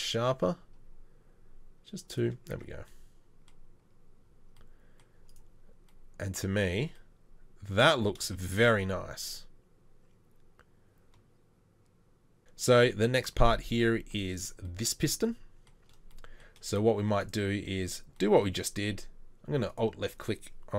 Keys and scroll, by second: 2.6 Tab, 17.8 Tab.